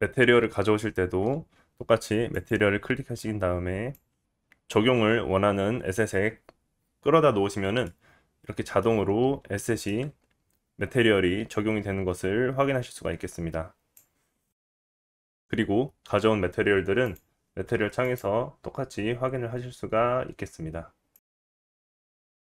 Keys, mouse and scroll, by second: 0.5-13.6 right drag, 13.6-16.4 middle drag, 14.7-15.7 scroll up 2, 16.4-22.4 drag.